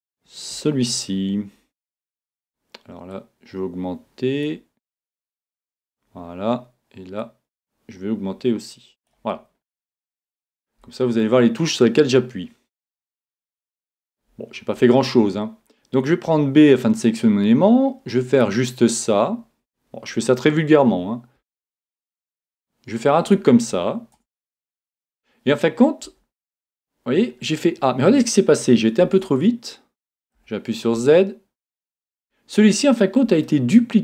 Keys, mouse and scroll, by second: 3.4 click, 8.3 click, 9.5-15.1 middle drag, 14.9 a, 15.2 a, 16.3 b, 21.4 s, 23.3-25.0 drag, 24.2 Tab, 25.0 Tab, 26.0 a, 27.1-30.5 middle drag, 27.1 a, 29.0 Tab, 30.4 z, 31.0 Tab, 32.1 Tab, 33.0-34.0 middle drag.